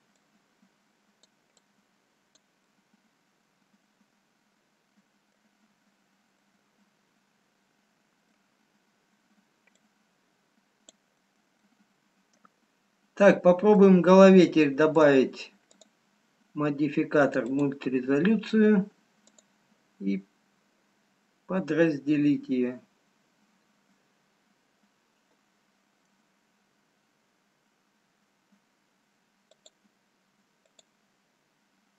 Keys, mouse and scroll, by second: 1.2 click, 2.4 click, 3.3 middle click, 6.0-6.3 scroll down 2, 6.5 middle click, 9.1 scroll up 1, 10.2 click, 10.2-10.5 scroll up 1, 11.7 middle click, 16.0 click, 20.1 click, 30.8 click.